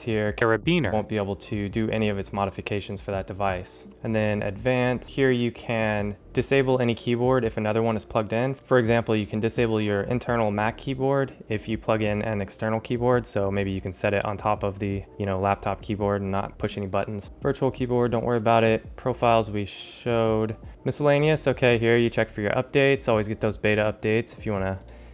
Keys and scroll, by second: 3.9 ctrl+alt+shift+super++.